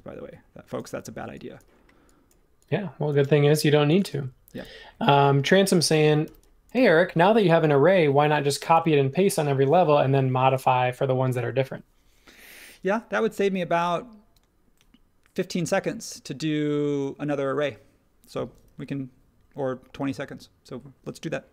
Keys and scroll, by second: 3.4 space, 4.5 super+1, 6.2 h, 6.7 space, 8.7 super+s.